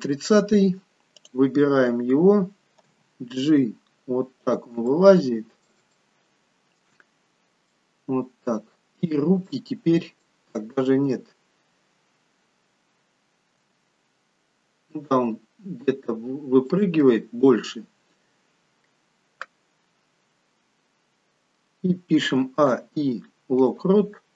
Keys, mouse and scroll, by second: 1.3 click, 2.8 g, 4.8 middle click, 6.2 shift+middle click, 7.0-7.7 scroll up 4, 7.7 middle click, 7.7 scroll up 2, 8.4-9.1 scroll down 1, 9.1-9.5 scroll down 1, 9.5 middle click, 13.5 g, 22.5 a, 22.8 i.